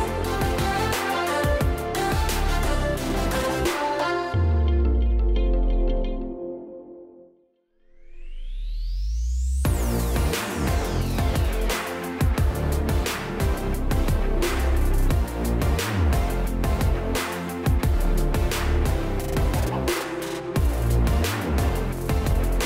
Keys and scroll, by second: 4.4 ctrl+space, 4.9 ctrl+space, 5.3 ctrl+space, 12.4 space, 20.1 space.